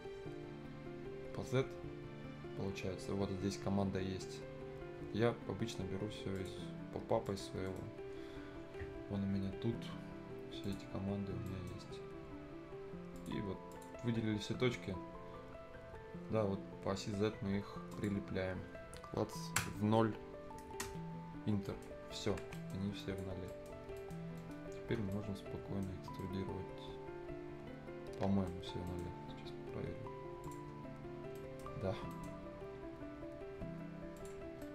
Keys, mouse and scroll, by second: 6.4 click, 7.7 middle click, 10.6 click, 11.1 scroll down 1, 11.5 right click, 11.8 scroll up 1, 13.2 click, 17.9 click, 18.2 scroll up 1, 18.8-20.7 scroll down 1, 20.9 Return, 21.5 scroll up 1, 21.7 right click, 21.9 scroll down 1, 22.2 Escape, 22.3 scroll up 1, 22.4 Escape, 22.5 right click, 23.0 click, 23.4 scroll down 1, 23.5 right click, 23.8 scroll up 1, 24.0 right click, 24.4 middle click, 25.1 right click, 25.9 scroll up 1, 26.2 right click, 26.2-28.6 right drag, 28.6 scroll up 1, 28.9 right click, 29.1-29.4 scroll down 1, 30.4 click, 30.7 scroll down 1, 30.9 scroll up 1, 31.4 right click, 31.7 scroll down 1, 31.9-33.4 scroll up 2, 32.1 right click, 34.2 click, 34.5 scroll down 1, 34.6 right click.